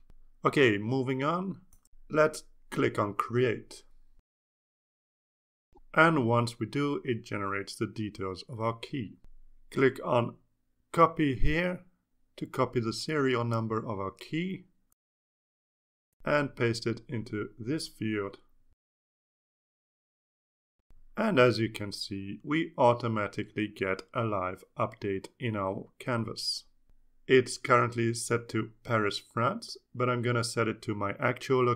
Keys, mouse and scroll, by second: 5.2 click, 14.9 click, 16.8 click, 18.7 click, 18.9 right click, 19.5 click, 20.7 click, 23.9 click, 25.5 ctrl+s, 29.2 click, 31.4 ctrl+a.